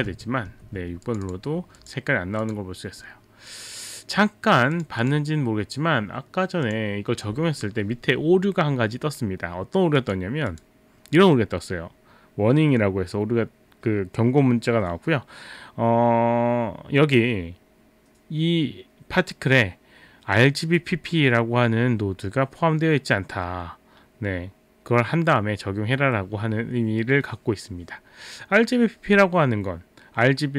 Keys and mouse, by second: 0.0-1.4 typing, 1.1 click, 1.3 click, 1.8 click, 2.5 click, 4.8 click, 5.0 click, 6.6 click, 10.0 click, 10.5 click.